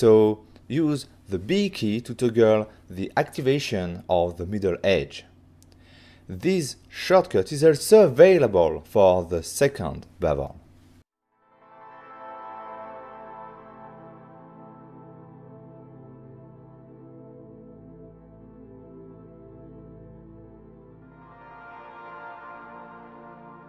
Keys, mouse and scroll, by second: 2.6 b, 3.1 b, 3.9 b, 5.6 b, 5.9 b, 7.0 b, 7.6 click, 9.9 click, 10.4 click, 12.5 click, 15.0 b, 15.5 b, 17.0 b, 17.8 b.